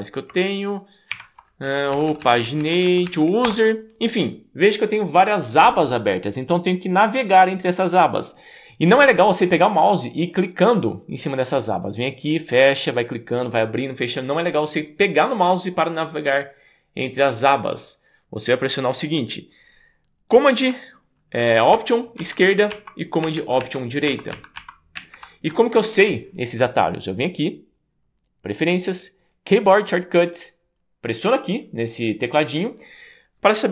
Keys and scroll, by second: 1.2 super+p, 1.7 Down, 1.8 Down, 1.9 Down, 2.1 Down, 2.2 Down, 2.4 Down, 2.6 Down, 2.9 Down, 3.1 Down, 3.5 Return, 22.4 alt+super+Left, 23.3 alt+super+Right, 24.1 alt+super+Left, 25.0 alt+super+Right.